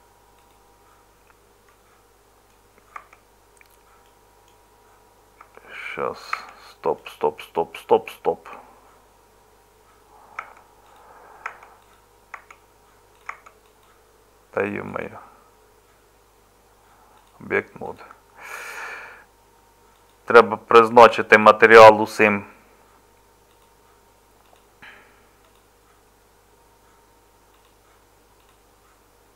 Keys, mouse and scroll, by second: 3.0 Tab, 10.4 Tab, 11.5 Tab, 12.3 Tab.